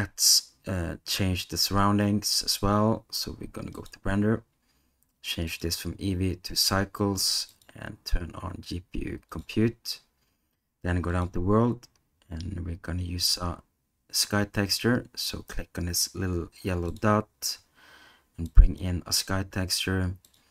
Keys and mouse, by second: 3.9 click, 5.6-6.7 drag, 7.7-9.4 drag, 11.1 click, 16.9-18.8 drag, 20.4-20.5 drag.